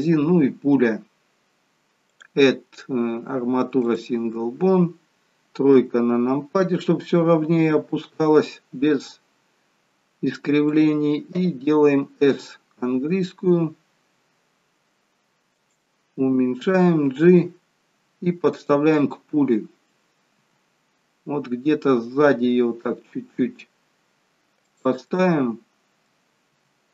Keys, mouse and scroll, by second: 2.0 click, 5.9 KP_3, 7.8 r, 18.9 middle click, 20.3 g, 25.2 middle click, 26.5 g.